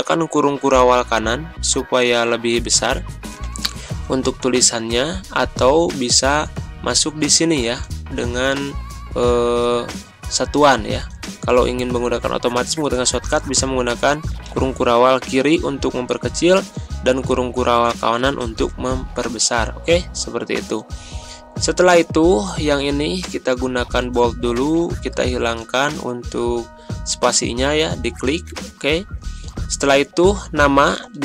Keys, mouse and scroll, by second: 0.5 ctrl+], 11.8-14.8 drag, 14.8-16.2 typing, 18.0 typing, 19.9-31.2 drag.